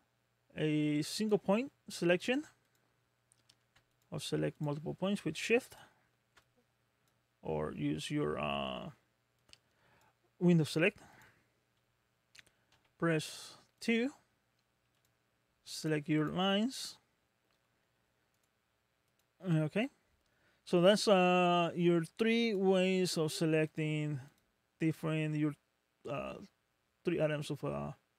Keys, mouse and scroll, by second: 1.2 click, 2.6 click, 3.9 shift+click, 4.6 shift+click, 5.7 shift+click, 6.4 click, 8.0 middle click, 8.7 scroll down 1, 9.4 click, 10.7 middle click, 11.1 click, 12.8 2, 13.8 click, 15.0 click, 15.8 shift+click, 16.2 shift+click, 16.8 shift+click, 18.4 right click, 19.1 click, 19.6 middle click, 22.2 3, 22.5 click, 23.7 click, 24.3 click.